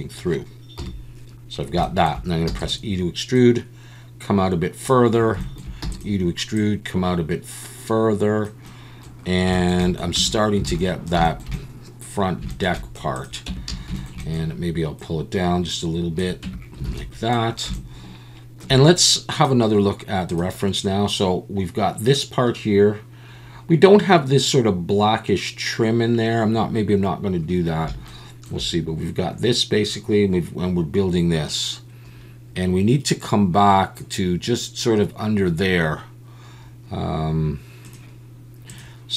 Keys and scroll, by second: 0.8 KP_7, 2.5 e, 5.8 e, 10.2 Tab, 10.7 alt+a, 13.5 Tab, 13.9 a, 16.4 Tab, 16.8 alt+a.